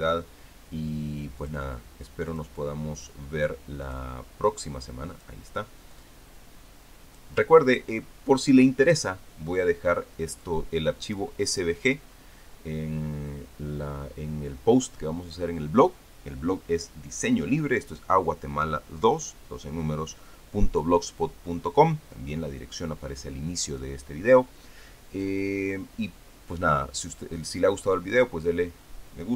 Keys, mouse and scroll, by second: 0.1 click, 2.2 click, 3.1 click, 4.6 click, 5.9 click, 6.7-8.1 drag, 8.1-8.8 ctrl+scroll up 1, 8.8-9.9 ctrl+scroll down 1, 9.9-11.2 scroll down 1, 11.2 click, 12.3 click.